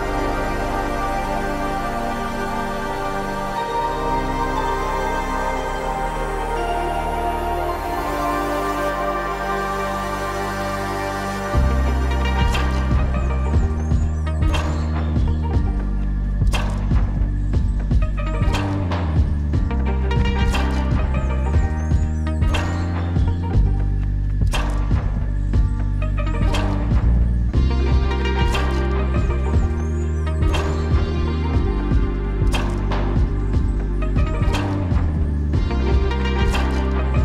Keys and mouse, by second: 0.0 n, 0.4 click, 1.4 click, 2.0 middle click, 2.8-3.3 middle drag, 4.2 Tab, 5.7 click, 6.1 click, 7.8 shift+click, 8.7 shift+click, 9.4 shift+drag, 10.4-11.5 shift+drag, 12.2-13.1 shift+drag, 14.1 shift+click, 14.9 ctrl+click, 15.5 middle click, 16.2-16.6 shift+drag, 17.0-17.3 shift+drag, 17.7 shift+drag, 19.8 ctrl+z, 20.3 click, 21.2 shift+click, 22.3-22.8 drag, 24.9 click, 27.1 click, 27.9 ctrl+z, 28.7 click, 30.4 click, 31.6-32.7 drag, 33.5 click, 35.3 click.